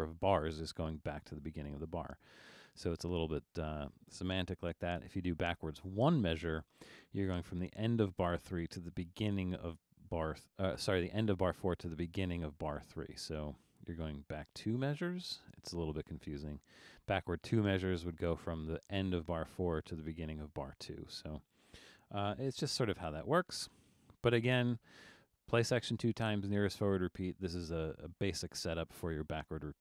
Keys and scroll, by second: 5.1 1, 16.2 2, 22.6 0.